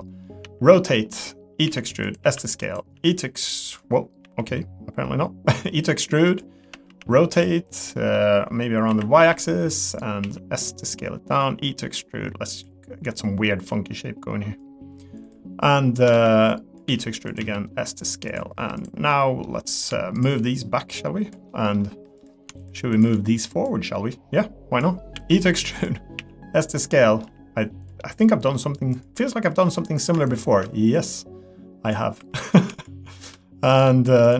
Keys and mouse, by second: 0.4 r, 1.6 e, 2.2 s, 2.9 r, 4.2 e, 6.6 r, 7.9 middle click, 10.2 s, 11.3 e, 14.7 click, 15.2 click, 16.1 ctrl+z, 16.6 click, 16.8 e, 17.4 s, 18.5 3, 18.8 click, 19.1 middle click, 19.7 click, 20.8 click, 21.5 middle click, 21.9 3, 22.6 shift+click, 22.9 shift+click, 23.6-24.8 drag, 25.1 e, 26.2 s, 26.9 middle click, 27.2 g, 28.0 middle click, 29.6 middle click, 30.3-31.9 shift+drag, 32.2 3, 32.8 shift+click, 33.4 middle click.